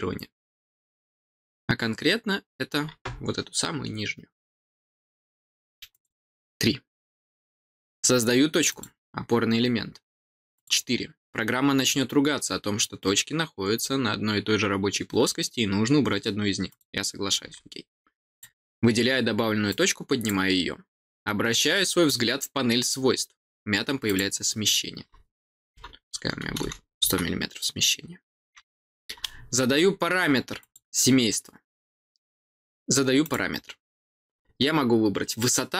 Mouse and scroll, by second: 0.7 middle click, 5.8 click, 8.6 click, 10.5 click, 16.6 click, 18.2 click, 19.6 click, 24.0 click, 33.2 click.